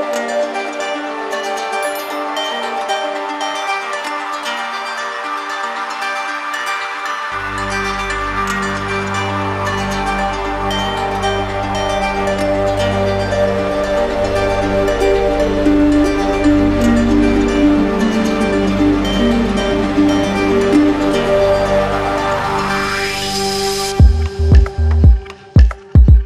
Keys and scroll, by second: 5.7 ctrl+alt+z.